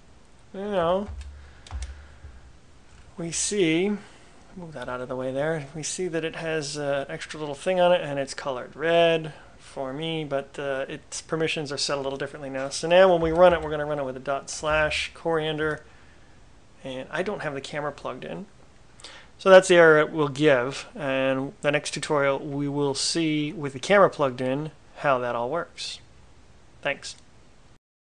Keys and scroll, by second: 1.0 Up, 1.2 Up, 1.8 Return, 13.6-15.4 typing, 15.7 Return.